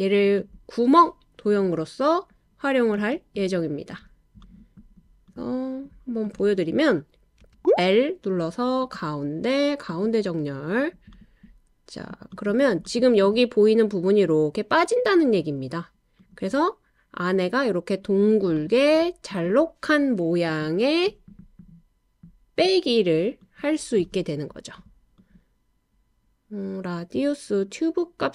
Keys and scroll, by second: 7.4 l, 22.7 typing, 24.4-25.3 typing.